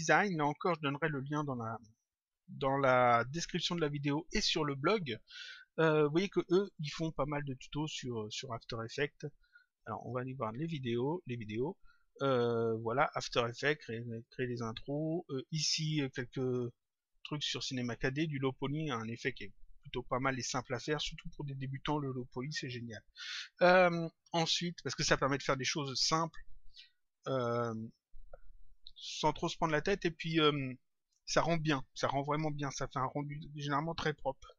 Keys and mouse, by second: 9.4 click.